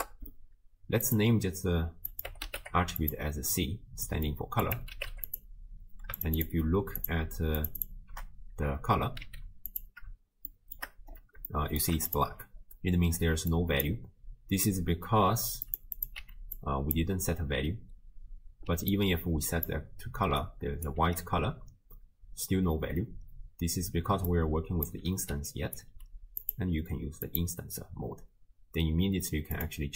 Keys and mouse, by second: 2.2-3.2 drag, 4.1 middle click, 4.7 click, 6.4 ctrl+shift+click, 7.0 ctrl+shift+click, 7.6 ctrl+shift+click, 9.3 z, 10.5 shift+drag, 11.5-11.8 shift+middle drag, 12.1 click, 13.5 click, 15.7 click, 16.1 click, 16.6 click, 18.7-20.3 d, 18.9 click, 20.4 click, 20.4 d, 20.9 d, 23.3-25.9 typing, 24.3 click, 25.5 click, 26.4-27.8 drag, 29.6 click.